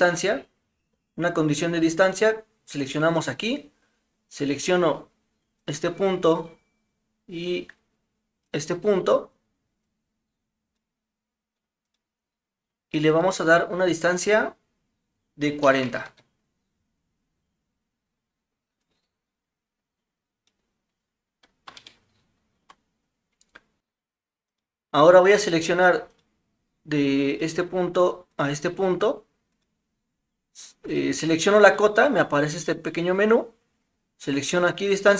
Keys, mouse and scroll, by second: 3.3 click, 9.9-10.8 drag, 12.0-16.7 drag, 18.9-20.5 drag, 21.9-22.6 shift+middle drag, 24.5 click, 26.2 click, 29.5-30.7 drag, 30.9 click, 31.8-35.1 drag.